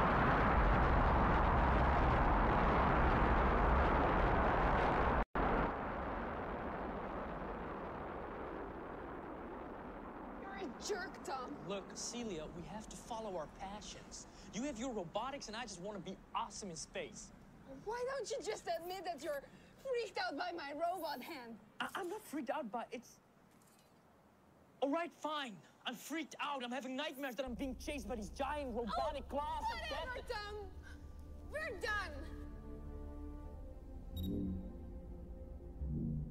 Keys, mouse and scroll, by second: 3.8-5.3 drag, 9.3-10.9 drag, 29.8-31.4 drag, 34.4 click.